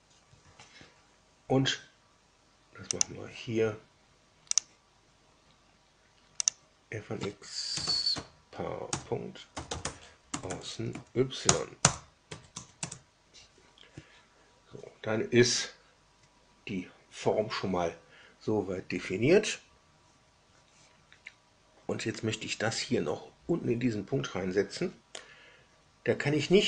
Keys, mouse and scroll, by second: 2.9 click, 4.5 drag, 6.4 click, 7.4-10.2 typing, 10.4 Down, 10.9 Down, 11.4 Return, 11.8 Return, 12.2 Tab, 12.5 Tab, 12.7 Return.